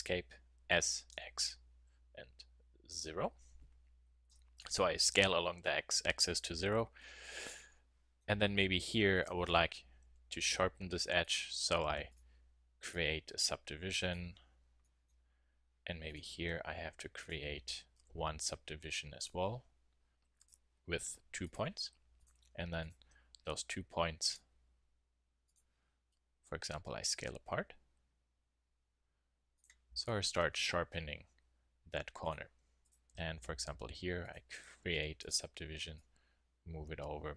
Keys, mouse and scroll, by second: 0.7 s, 6.6-8.3 middle drag, 8.8 middle click, 9.2 click, 10.0 w, 11.8 a, 12.1 click, 14.5 click, 15.1 middle click, 15.1-16.3 drag, 15.2 middle click, 16.7-18.0 middle drag, 18.1 w, 23.6 click, 26.3 s, 31.0 click, 31.3 middle click, 32.3-33.4 drag, 33.4 w, 34.3 click, 34.9 a, 35.2 click.